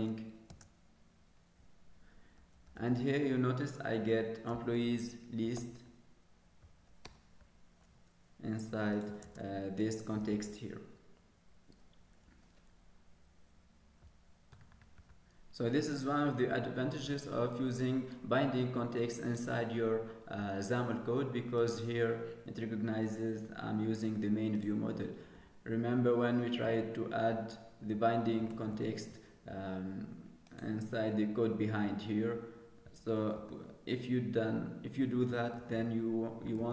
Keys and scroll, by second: 33.3 ctrl+s.